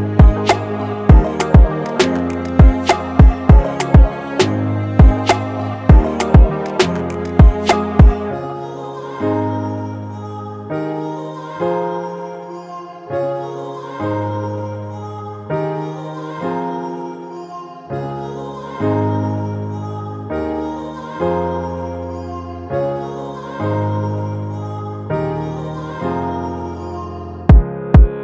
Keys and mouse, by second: 0.8 click, 3.8-10.7 drag, 12.3-15.7 drag, 15.7-19.4 drag, 21.4 click, 22.6 shift+click, 27.5-28.2 drag.